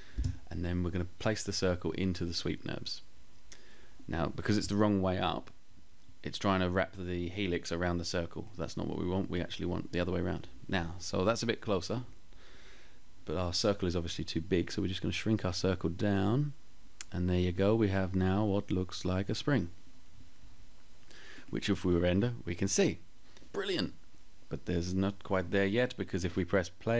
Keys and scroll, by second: 0.3 Page_Up.